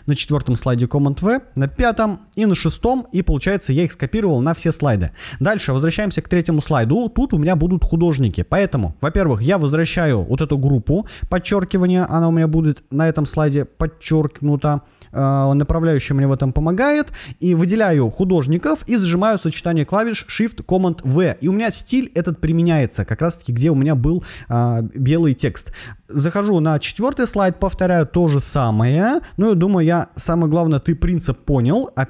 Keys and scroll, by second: 1.5 super+v, 20.8 shift+super+v, 31.9 shift+super+v.